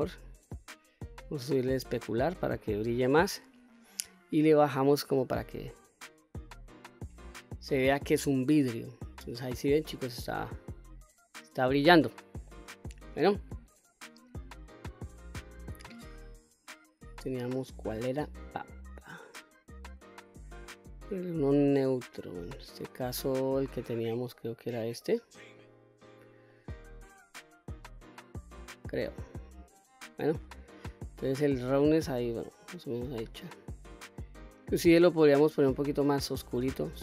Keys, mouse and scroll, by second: 1.5-3.6 drag, 4.4-7.2 drag, 7.6-8.0 scroll down 1, 8.0-12.6 middle drag, 13.6-24.9 drag, 25.7-26.5 middle drag, 26.6-27.0 scroll down 1, 27.0-27.5 scroll up 2, 27.5-29.8 middle drag, 30.0 scroll down 1, 32.3-33.8 drag, 34.7 click.